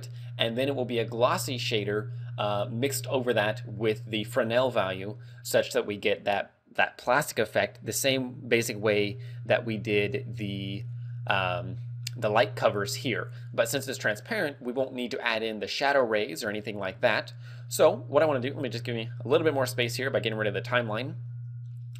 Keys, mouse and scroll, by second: 9.4 right click, 9.4-10.1 scroll down 2, 10.1-11.1 scroll down 3, 11.1 right click, 18.8 click, 21.4-21.9 scroll up 3.